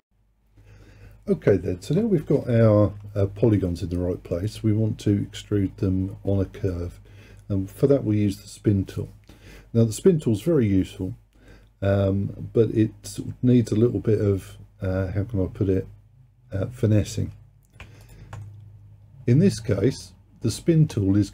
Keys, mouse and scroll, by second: 3.6-6.8 middle drag, 17.6-18.1 scroll down 2, 18.1 alt+click, 18.5-21.3 middle drag.